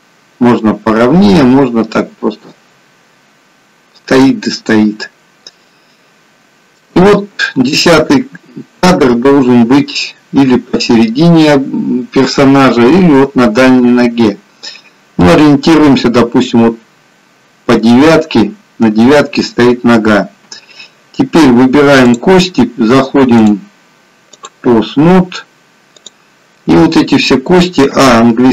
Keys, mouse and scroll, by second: 5.8 shift+middle click, 17.2-18.7 scroll up 2, 18.7-19.7 scroll down 2, 19.8-20.3 scroll down 2, 22.1 click, 23.5 click, 26.0 click, 28.0 a.